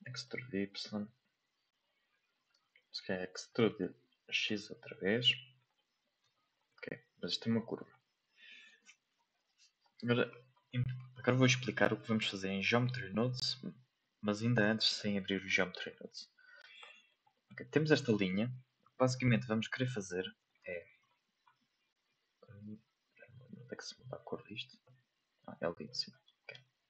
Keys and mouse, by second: 0.0 middle click, 0.4 e, 2.7 middle click, 3.6 e, 6.2 Tab, 6.7 middle click, 7.8 middle click, 10.8 shift+middle click, 11.3 middle click, 11.6-11.9 shift+middle drag, 12.8 right click, 13.2 shift+middle drag, 13.9 g, 14.8-15.2 middle drag, 15.5 shift+middle click, 16.1-16.6 middle drag, 16.8 middle click, 17.3 shift+middle drag, 18.0 middle drag, 19.0 click, 19.4 middle click, 20.6 shift+middle click, 23.6 n, 24.1 n, 24.9 click.